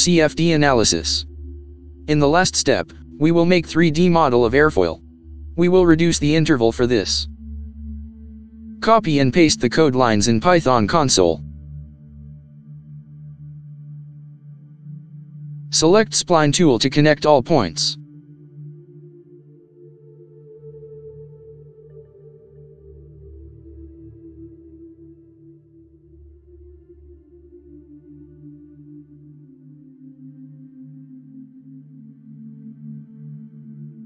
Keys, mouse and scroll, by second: 4.7 BackSpace, 12.1 ctrl+v, 12.7 Return, 18.6 click, 20.1 click, 21.3 click, 24.5 click, 26.2 click, 27.5 click.